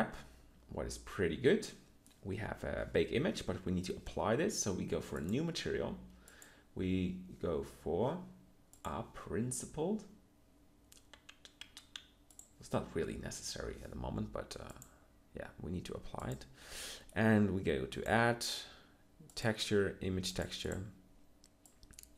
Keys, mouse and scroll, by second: 3.1 Tab.